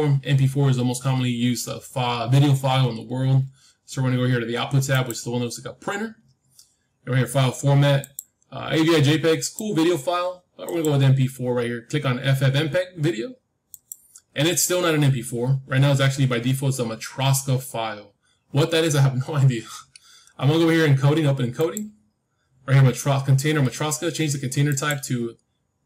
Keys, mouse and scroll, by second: 4.8-6.8 drag, 7.9-10.0 drag, 10.6-12.6 drag, 17.7-19.7 middle drag, 21.5-23.5 drag, 21.9-23.9 middle drag, 24.6-25.8 drag.